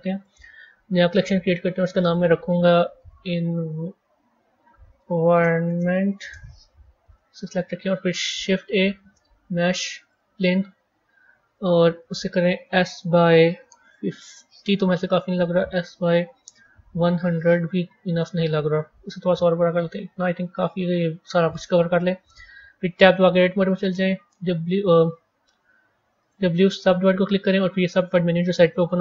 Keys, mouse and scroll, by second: 0.0 click, 1.0-1.9 right drag, 1.9 click, 2.0-5.1 drag, 7.0 click, 8.5 shift+a, 22.9 Tab, 23.6-29.0 right drag.